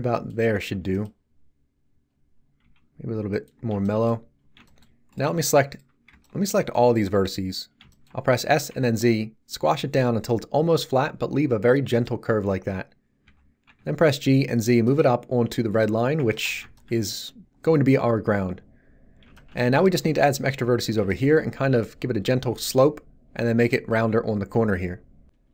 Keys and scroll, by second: 6.0 b, 8.4 s, 8.7 z, 13.2 g, 13.6 z.